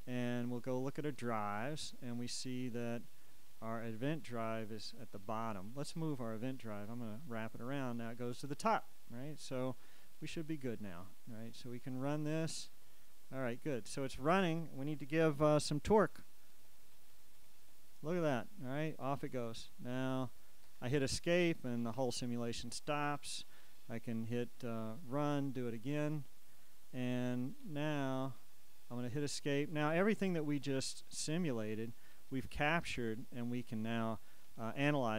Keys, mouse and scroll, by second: 16.3 Page_Up, 19.3 Page_Down, 20.8 Escape, 26.6 click, 27.2 Page_Up, 28.5 Escape, 31.2-33.6 drag, 33.6-35.1 scroll down 2.